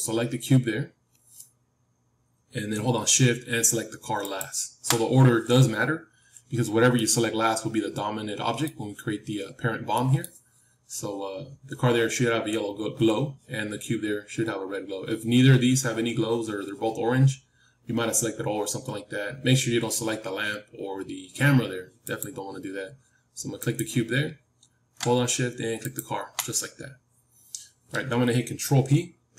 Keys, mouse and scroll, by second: 4.1-6.9 drag, 6.9-9.8 middle drag, 9.9-12.3 middle drag, 18.9-19.6 scroll down 1, 19.6-22.4 middle drag, 21.4-22.4 scroll up 1, 22.4-29.3 drag.